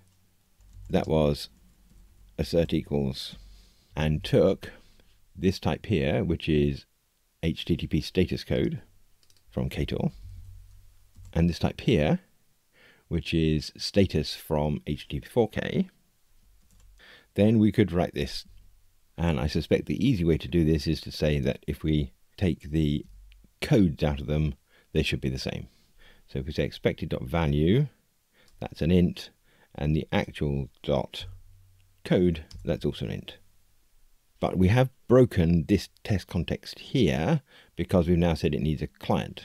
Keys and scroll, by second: 3.3 Tab, 10.2 alt+shift+Left, 23.0 Tab, 32.4 Return.